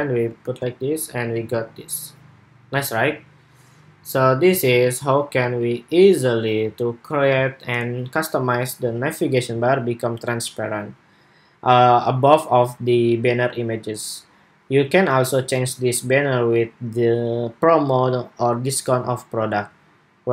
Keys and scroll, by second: 0.1 super+r.